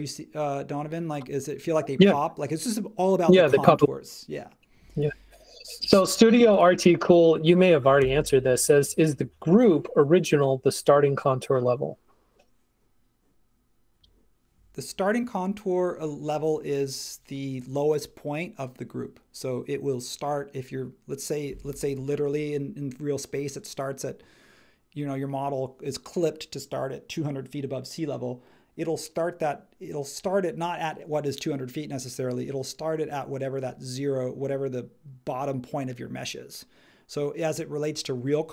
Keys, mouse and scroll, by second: 8.0 super+s.